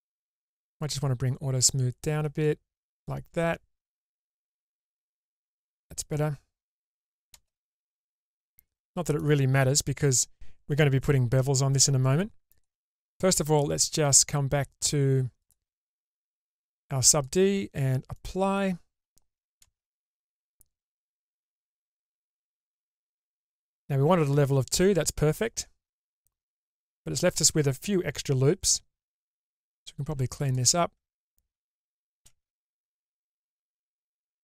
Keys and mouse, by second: 1.1-5.3 drag, 5.7-7.0 middle drag, 7.5 shift+space, 7.9-9.4 middle drag, 12.7 click, 17.4-18.4 drag, 19.8 shift+space, 21.7 click, 22.5 Tab, 23.7-24.9 middle drag, 25.5 click, 30.6 alt+click, 33.0 ctrl+x, 33.6 middle click.